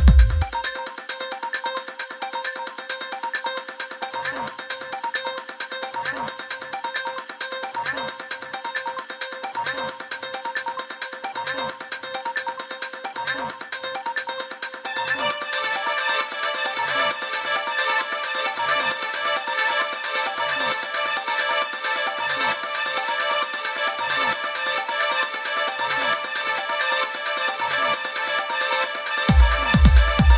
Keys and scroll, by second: 2.7 Up, 3.1 Right, 3.8 Up, 7.3 super+=, 8.5 super+=, 19.8 super+-, 20.9 i, 23.5 super+=, 24.4 Down, 25.0 Up, 26.9 Down, 27.5 Left.